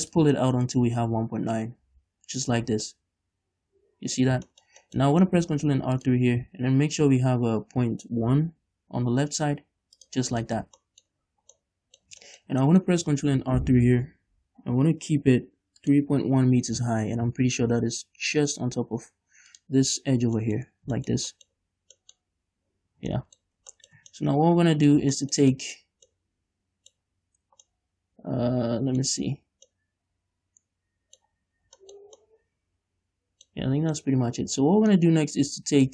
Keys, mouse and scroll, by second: 0.3-3.0 drag, 3.0 middle click, 4.1-5.8 middle drag, 5.3-5.8 scroll up 2, 5.8 ctrl+r, 10.3 shift+click, 10.4 middle click, 10.4 scroll down 2, 10.9-12.9 middle drag, 11.4-11.8 scroll up 2, 13.5 ctrl+r, 17.6-19.8 drag, 20.6-23.5 middle drag, 20.8-21.2 scroll up 2, 21.7-22.3 scroll up 2, 22.9 scroll down 2, 23.1 Tab, 23.6-31.5 middle drag, 23.8 shift+scroll down 1, 24.1 Tab, 27.2-27.9 scroll up 2, 31.5-32.0 scroll up 2, 31.9-32.9 shift+middle drag, 33.9 scroll down 1, 34.1-35.9 middle drag.